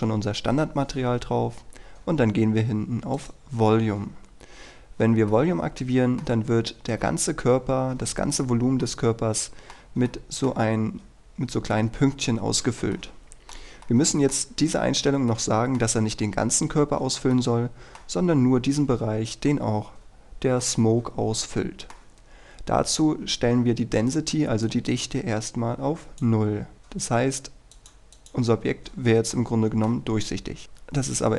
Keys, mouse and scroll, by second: 5.1-5.4 scroll down 1, 5.4-10.1 middle drag, 11.0-13.0 scroll up 1, 13.0-16.6 middle drag, 16.7-17.4 scroll up 1, 17.4-18.6 middle drag, 19.9-20.7 scroll down 1, 20.7-22.6 middle drag, 24.7-26.6 drag, 26.9 scroll down 1, 27.3-27.8 scroll up 1, 27.8 click, 29.0 scroll up 1, 29.4-30.5 middle drag, 30.6-31.3 scroll down 1.